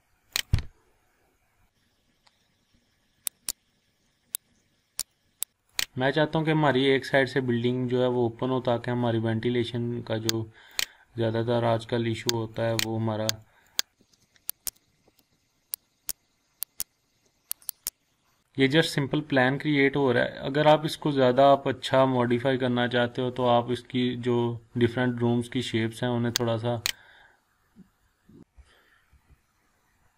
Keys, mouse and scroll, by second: 0.3 click, 0.7 scroll down 1, 1.1-1.6 scroll up 1, 1.9 scroll down 1, 2.2 scroll up 1, 2.6 scroll down 1, 2.9-3.3 scroll up 1, 3.3 click, 4.5-5.1 click, 5.3 scroll down 1, 5.6 click, 5.9 scroll up 1, 6.9 scroll down 1, 7.4-7.7 scroll up 1, 10.7 click, 13.9 ctrl+z, 14.6 click, 15.0 Left, 15.8-16.2 drag, 17.9 scroll down 1, 18.2 scroll up 1, 18.7 scroll down 1, 18.8-20.7 scroll up 1, 22.6-23.5 scroll down 1, 26.9 click, 27.7-28.3 scroll up 1, 28.3 scroll down 1, 28.4 click, 29.1 Delete, 30.0-30.1 scroll up 1.